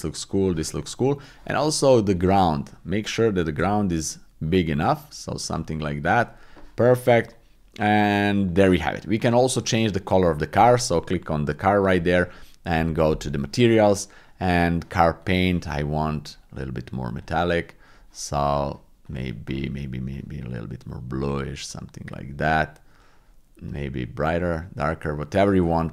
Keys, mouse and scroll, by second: 3.6 s, 4.5 click, 7.8 middle click, 9.3-10.0 drag, 17.8 click, 19.0 click.